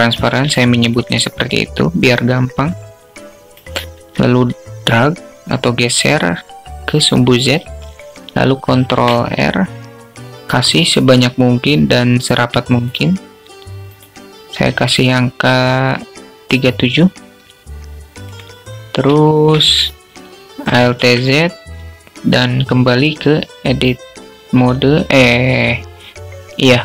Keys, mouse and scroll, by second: 0.0 alt+shift+click, 0.9-3.0 drag, 8.1 ctrl+r, 13.0-17.4 drag, 18.6 alt+shift+click, 20.3 alt+z.